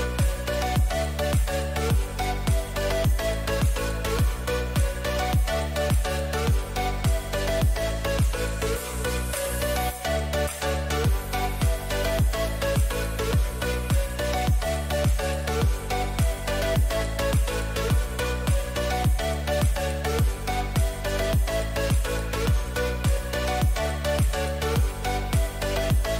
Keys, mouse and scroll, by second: 0.0 ctrl+z, 0.7 ctrl+z, 1.6 a, 2.5 KP_3, 4.0-5.9 middle drag, 6.2 z, 6.6 a, 6.8 a, 8.5 b, 10.2 g, 14.8-16.0 middle drag, 17.6 a, 19.1-21.1 drag, 19.9-22.6 right drag, 21.9 KP_3, 22.6 z, 23.4-25.2 middle drag, 24.3 e.